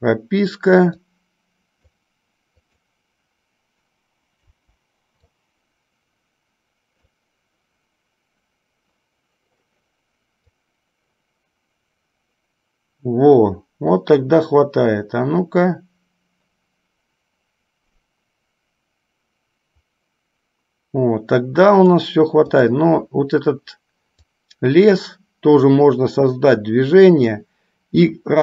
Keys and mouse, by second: 1.3 click, 2.7 click, 4.5 Delete, 5.4-7.3 drag, 10.7-22.2 drag, 22.8 click, 24.4 click, 24.7-27.5 drag.